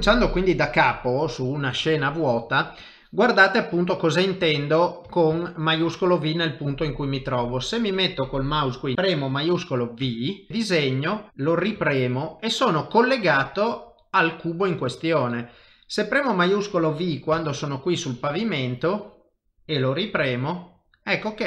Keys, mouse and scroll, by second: 2.8 click, 3.4 middle click, 5.3 shift+middle click, 6.0 middle click, 10.5 click, 11.8 shift+v, 12.4 middle click, 17.9 click, 20.3 shift+v, 20.8 middle click.